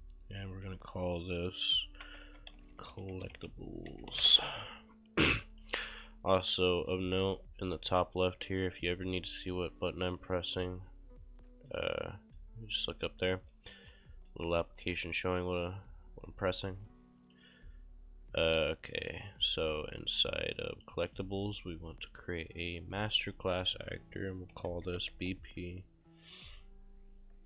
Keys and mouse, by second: 1.8-4.7 typing, 5.6 click, 6.4 right click, 10.7 right click, 11.9 right click, 13.1 right click, 13.9 s, 14.8 ctrl+space, 15.3 click, 17.2 click, 20.6 click, 21.1 right click, 22.0 click, 23.1 click, 24.3-25.7 typing.